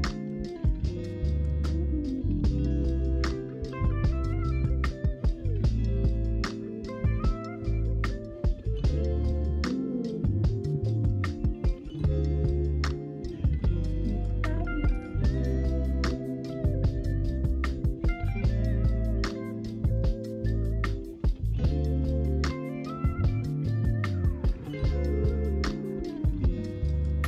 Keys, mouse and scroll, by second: 0.5 alt+shift+click, 1.8 alt+shift+click, 2.5 s, 4.1 s, 4.2 s, 4.4 right click, 4.4 middle click, 5.3 Tab, 6.0 right click, 6.8-9.9 middle drag, 9.9-10.4 scroll up 1, 10.4 click, 10.8 Tab, 11.0-12.9 middle drag, 12.9 KP_1, 14.5 click, 17.6-18.4 scroll up 2, 18.4 s, 22.7 s, 22.7 s, 22.8 s, 23.1 Tab, 26.2 Tab.